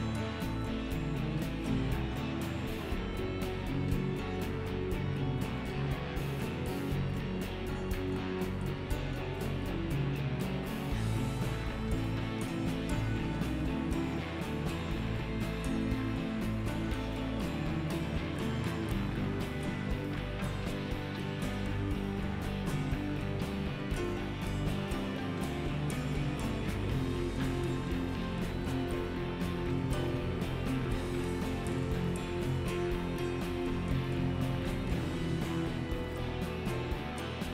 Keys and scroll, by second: 23.5 alt+x.